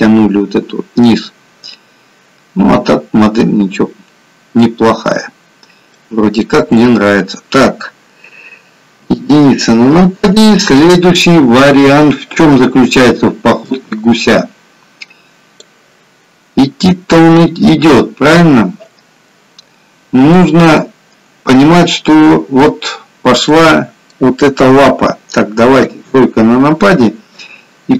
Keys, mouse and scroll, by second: 5.4-7.7 scroll down 2, 5.9 middle click, 8.9 KP_1, 13.9 click, 20.4 middle click, 23.4 middle click, 25.8 KP_3.